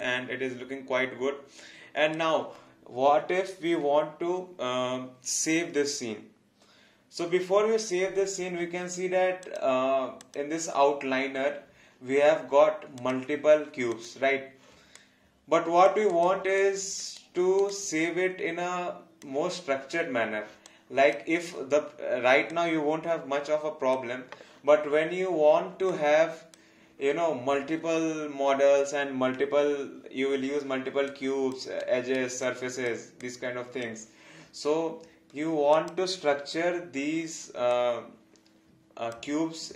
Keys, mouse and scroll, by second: 9.5 click, 13.0 click, 14.9 alt+click, 16.6 alt+click, 17.2 alt+right click, 17.7 alt+click, 20.7 alt+click, 22.5 alt+click, 25.9 alt+click, 31.1 alt+click, 31.8 alt+right click, 32.7 alt+click, 35.7 click, 37.7 alt+click.